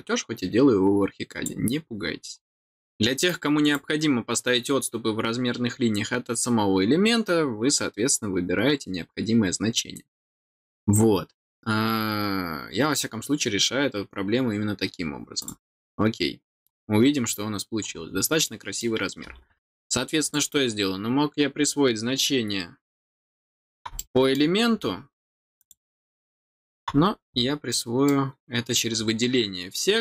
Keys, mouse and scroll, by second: 3.2 click, 15.4 click, 16.7 scroll down 1, 16.9 scroll up 1, 17.8 scroll down 1, 18.4 middle click, 20.2 click, 23.3 click, 23.9 middle click, 25.5 click, 28.0 middle click.